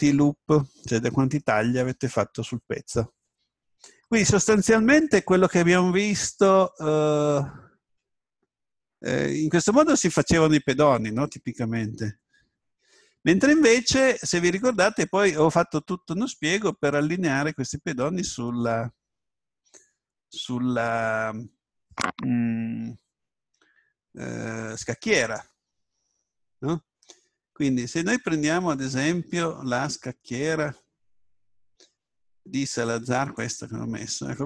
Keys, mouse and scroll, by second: 5.9-6.5 scroll up 1, 6.5-8.4 middle drag, 8.4 scroll up 1, 11.6-12.3 scroll up 1, 12.3-14.1 middle drag, 17.9-22.0 middle drag.